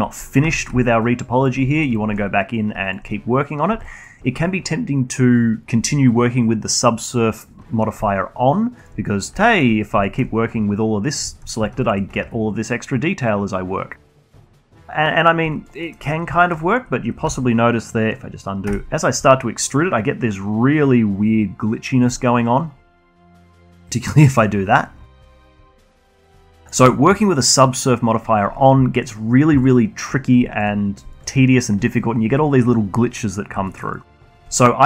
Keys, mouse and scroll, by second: 0.4 z, 0.7-1.8 alt+drag, 1.8-2.5 scroll up 1, 2.5 2, 2.8-3.1 alt+drag, 3.1-3.8 scroll up 1, 3.8-6.8 alt+drag, 7.6-8.0 scroll down 1, 8.0-9.0 alt+drag, 9.0-9.4 scroll up 1, 9.4 alt+middle drag, 9.7-10.0 scroll up 2, 10.0-11.2 alt+middle drag, 11.5 shift+drag, 11.7-12.7 alt+drag, 12.7 e, 15.4 alt+click, 15.8 alt+middle click, 16.0-16.3 scroll up 2, 16.3 alt+middle click, 16.5-17.7 alt+drag, 17.7 ctrl+z, 19.1 e, 23.1 scroll down 1, 23.3-25.6 alt+drag, 25.6 ctrl+z, 25.9-26.2 scroll down 2, 26.2-26.5 alt+middle drag, 26.5-29.0 alt+drag, 29.3 scroll down 2, 29.6-30.1 alt+drag, 30.1 scroll up 1, 30.4 alt+drag, 30.7 scroll up 2, 31.0 alt+click, 31.5 scroll down 2, 31.7-33.6 alt+drag, 33.6 alt+middle drag, 33.8-34.2 alt+drag, 34.2-34.8 alt+middle drag.